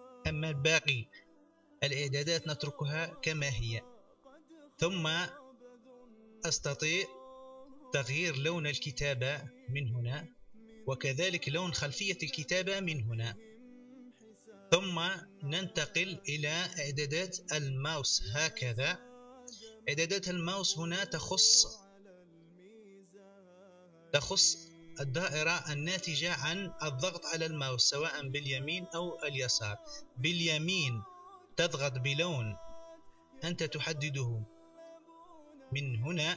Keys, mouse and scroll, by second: 9.8 click, 11.7 click, 12.4 click, 17.2 click, 22.2 click, 24.5 click, 26.2-26.8 drag, 27.6 click, 28.1 right click, 29.4 right click, 31.3 right click, 32.2 right click, 32.5-33.6 right drag.